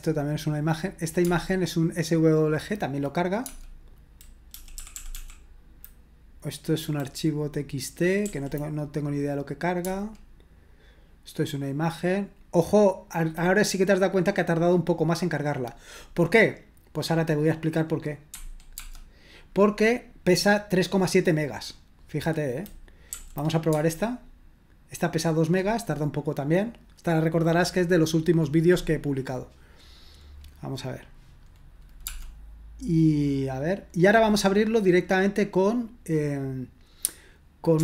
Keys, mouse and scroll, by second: 0.2 click, 4.5 Right, 4.7 Right, 4.9 Right, 5.1 Right, 8.2 Right, 18.3 Escape, 18.8 space, 23.0 Up, 23.7 space.